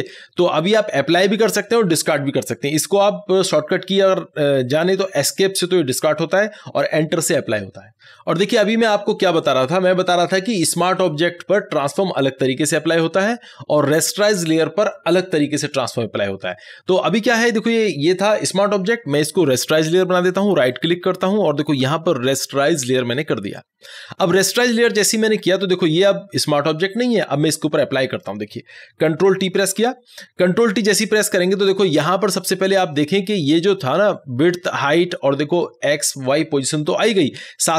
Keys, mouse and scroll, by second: 20.6 click, 20.7 right click, 23.1 click, 25.8 click, 25.9-29.6 drag, 29.6 ctrl+t.